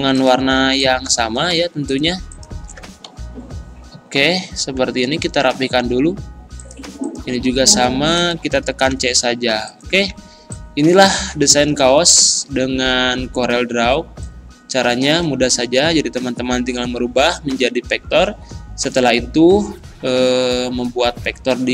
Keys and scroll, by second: 3.1 Right, 8.9 c.